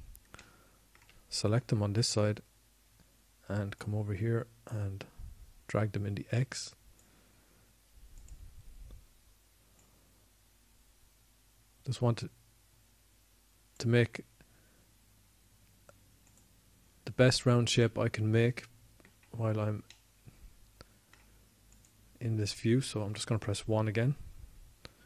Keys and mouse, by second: 5.6-7.1 drag, 7.4-9.4 drag, 14.9 click, 19.9-21.2 drag, 21.2-23.2 middle drag, 24.4 middle click.